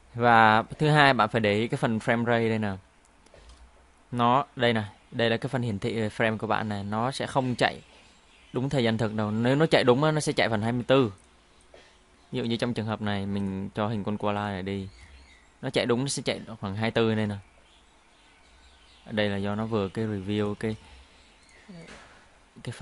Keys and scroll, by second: 3.3 space, 10.6 space, 14.9 space, 20.6 space.